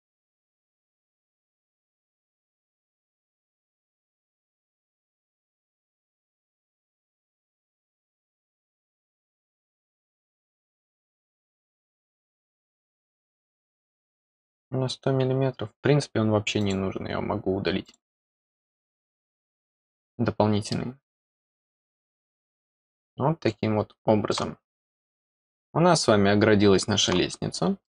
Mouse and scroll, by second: 0.0 click, 2.5 click, 4.0 click, 16.5 click, 17.8 click, 20.7-24.3 middle drag, 24.6-24.9 scroll down 2, 25.1-27.0 middle drag, 27.3 scroll down 2, 27.8-27.9 middle drag.